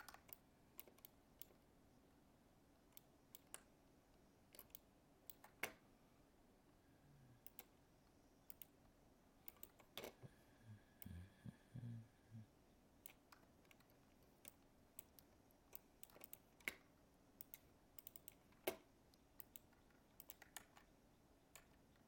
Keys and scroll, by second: 20.5 ctrl+z.